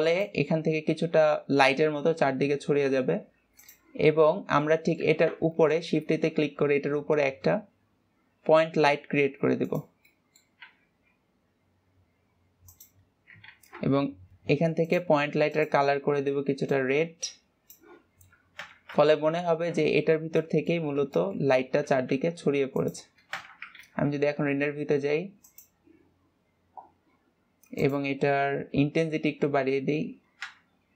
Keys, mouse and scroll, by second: 0.6 click, 4.2 drag, 4.9 scroll down 1, 5.2-6.2 middle drag, 6.2 shift+a, 10.6-11.2 middle drag, 11.2 g, 17.2 click, 19.4 KP_0, 20.4-20.9 scroll up 3, 20.9-21.4 middle drag, 21.4 scroll up 1, 21.6-22.0 shift+middle drag, 22.0-22.4 scroll up 1, 22.4 g, 23.9 KP_0, 24.8-26.0 scroll down 3, 26.0 click, 28.3-30.9 drag.